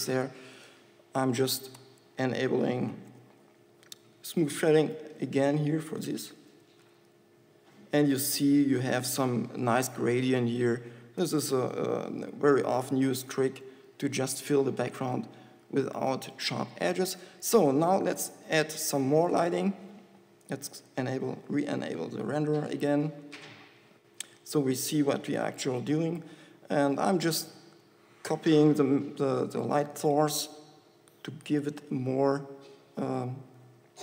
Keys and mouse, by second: 2.1 n, 2.8 n, 3.3 t, 5.3 t, 6.3 n, 7.3 z, 11.5 n, 18.4 KP_7, 18.8 KP_5, 27.6 shift+d.